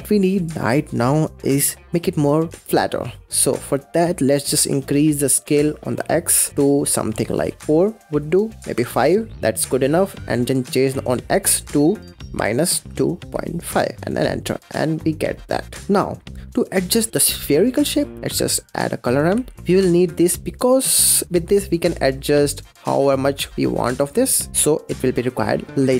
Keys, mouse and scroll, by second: 2.5-4.6 middle drag, 4.6-8.0 shift+drag, 8.6 click, 11.1-14.2 drag, 14.6-15.8 middle drag, 17.9 scroll down 3, 18.2 middle click, 18.2 shift+a, 20.5-21.0 scroll up 5, 21.0 middle click, 21.3-24.1 drag, 24.1-24.5 scroll down 10, 24.5 middle click, 24.8 click, 25.5 click, 25.8 middle click.